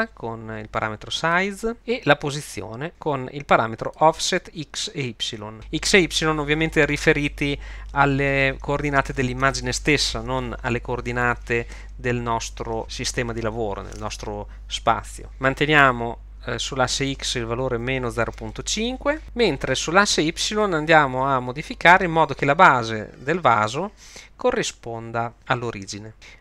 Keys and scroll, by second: 17.8 -, 18.2 0, 18.3 ', 18.5 5, 18.8 Return.